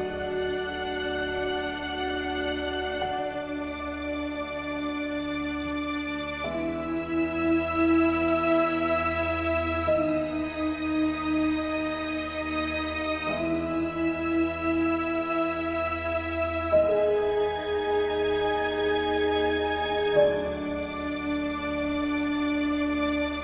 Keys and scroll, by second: 14.5 ctrl+space.